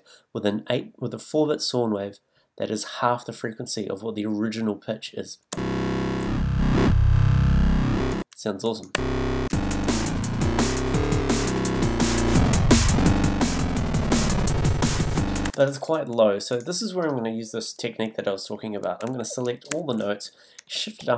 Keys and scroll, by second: 5.5 a, 8.9 a, 15.4 space, 19.7 super+a, 20.7 shift+super+a, 21.0 shift+super+Up.